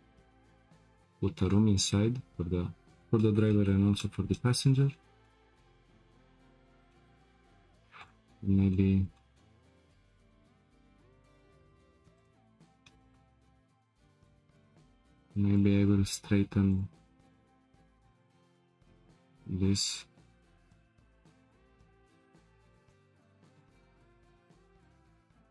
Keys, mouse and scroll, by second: 2.4-3.2 scroll down 1, 3.2-4.7 middle drag, 4.7-5.2 scroll down 4, 5.2-6.5 shift+middle drag, 6.5-6.9 scroll up 2, 6.9-7.6 shift+middle drag, 7.6-8.0 scroll up 2, 8.0 click, 8.4 Tab, 8.7-12.1 middle drag, 12.1 click, 12.9 shift+middle click, 13.4-14.8 scroll up 1, 15.5 click, 16.7 shift+click, 17.2 shift+click, 18.5 g.